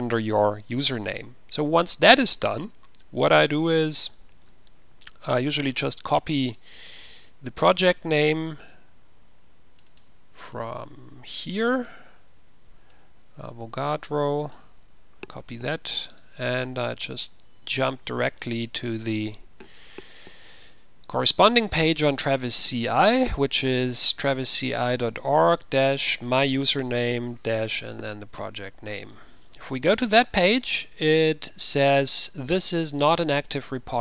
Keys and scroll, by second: 15.1 ctrl+c, 27.7 /, 28.0 ctrl+v, 29.3 Return.